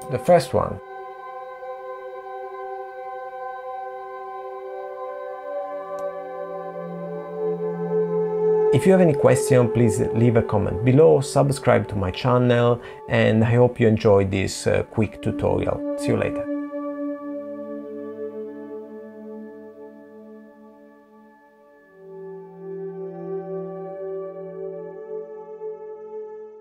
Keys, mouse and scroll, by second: 0.7 click, 6.2 middle click.